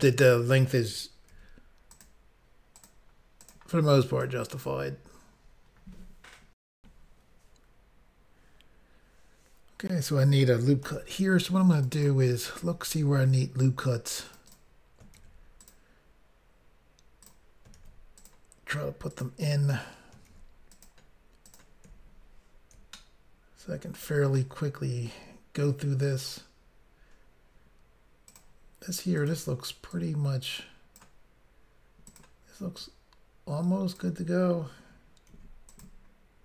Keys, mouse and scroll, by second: 1.4 ctrl+r, 2.1 click, 2.9 click, 3.0 click, 3.5 click, 4.3 click, 6.7 Insert, 10.8 ctrl+r, 11.7 click, 11.9 click, 12.8 ctrl+r, 13.5 scroll up 1, 14.2 click, 14.4 click, 14.5 double click, 15.1 ctrl+r, 15.6 double click, 17.2 click, 17.7 ctrl+r, 18.1 click, 19.1 click, 19.2 click, 20.2 ctrl+r, 20.7 click, 21.4 click, 22.9 shift+middle click, 28.3 click, 28.4 click, 29.2 click, 29.3 click, 29.9 click, 32.1 click, 32.2 click, 32.8 click, 35.4 ctrl+r, 35.7 click, 35.8 click.